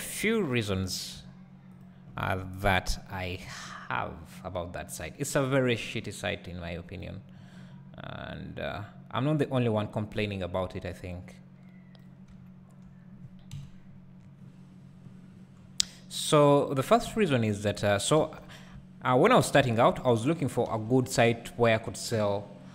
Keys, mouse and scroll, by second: 0.8-2.0 drag, 2.6 KP_7, 6.0-9.0 drag, 7.3-9.0 scroll up 2, 12.4 `, 13.5 KP_1, 14.2-17.0 scroll down 2, 17.0 1, 18.2 2, 18.7 `, 20.7 2, 21.0-22.7 drag.